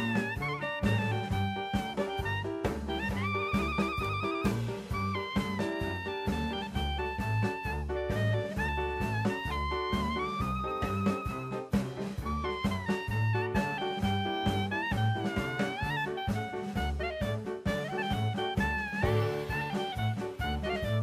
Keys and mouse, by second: 2.3 shift+middle click, 3.7 click, 8.6 shift+middle click, 9.4-12.0 middle drag, 13.3 click, 13.8 click, 14.4 middle click, 15.6-16.4 middle drag, 16.7 shift+d, 17.1 right drag, 17.6-18.6 drag, 18.9 middle click, 20.0 r, 20.3 y.